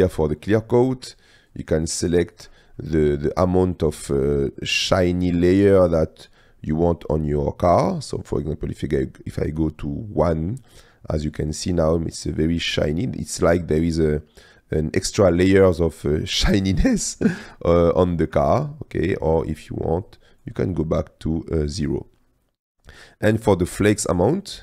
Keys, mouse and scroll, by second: 1.6-2.7 drag, 2.8-3.8 middle drag, 4.1 click, 6.1 click, 8.3 click, 10.9 middle click, 11.3 click, 11.9 click, 12.0 middle drag, 12.7 middle drag, 13.7 middle click, 16.1 click, 17.0 middle click, 18.2 shift+middle click, 19.1 click, 20.1 click, 21.4-22.9 drag, 24.5 click.